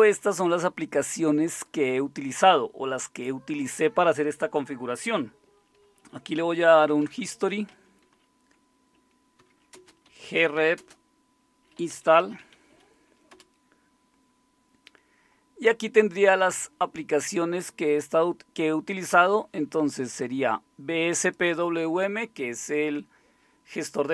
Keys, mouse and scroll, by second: 6.5-8.0 typing, 9.4-13.3 typing.